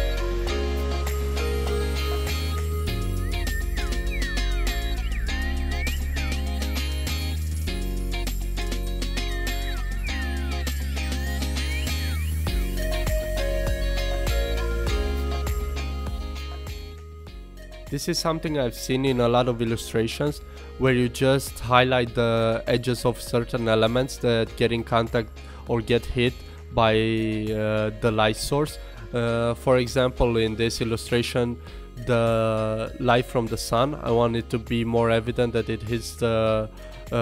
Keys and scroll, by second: 6.3 super+z, 9.4 super+x, 9.5 Escape, 9.7 alt+super+z, 10.4 super+z, 13.2 super+z, 14.1 super+z, 15.5 super+z, 17.1 super+z, 18.6 super+z, 20.8 super+z, 22.8 super+z, 26.2 super+z, 27.6 super+z, 28.2 super+z, 29.6 super+z, 33.1 alt+BackSpace, 34.5 alt+BackSpace.